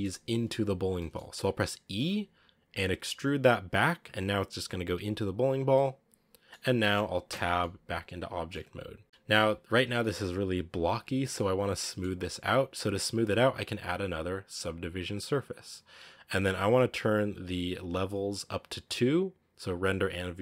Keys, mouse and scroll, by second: 0.7 scroll down 1, 0.8-1.8 middle drag, 1.8 e, 5.5 scroll down 1, 5.6-7.2 middle drag, 7.2 Tab, 7.5-8.6 middle drag, 8.6-9.0 scroll up 1, 9.0 scroll down 1, 9.0-9.4 middle drag, 9.4-9.9 scroll up 3, 9.9 middle click, 10.2-11.2 scroll up 1, 11.2-11.7 scroll down 3, 11.7-13.1 middle drag, 15.7-20.4 drag.